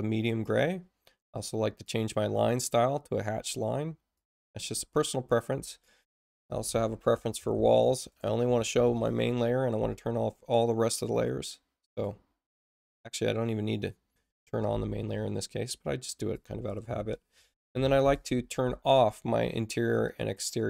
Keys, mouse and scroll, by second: 0.4 click, 1.8-4.3 drag, 5.8 click, 7.1-9.3 typing, 11.1 click, 11.9 click, 16.0 click, 17.1-18.5 typing, 20.0 click.